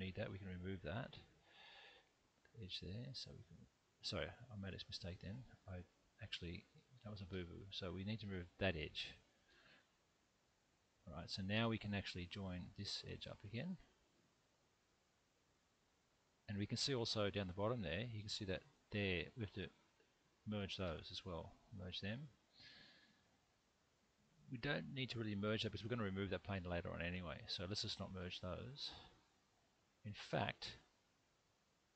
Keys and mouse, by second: 1.6 click, 3.2 x, 4.7 Escape, 6.8 ctrl+z, 7.3 ctrl+z, 9.5 x, 11.5 1, 12.4 click, 18.2 f, 18.8 click, 19.4 click, 20.8 m, 23.9-26.3 middle drag, 26.7 middle click, 28.8-30.0 middle drag.